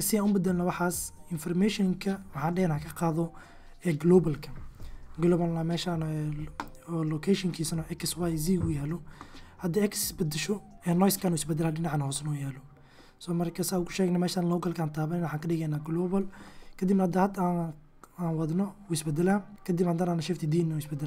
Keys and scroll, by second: 0.5 x, 4.0 n, 16.3 g, 19.5 shift+d.